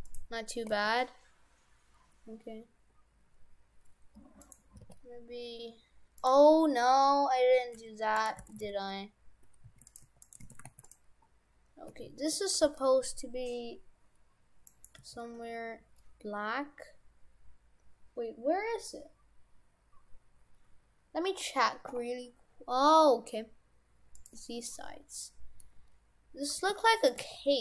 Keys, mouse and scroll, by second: 0.7 r, 4.8 r, 7.2 Delete, 8.2 right click, 8.4 shift+f, 10.0 Tab, 10.2 right click, 10.5 shift+f, 11.2-11.9 scroll down 6, 11.9 a, 12.6 g, 15.0 g, 24.6-24.9 scroll up 5, 25.2 middle click, 25.8 scroll up 1, 26.6 g, 27.3 g.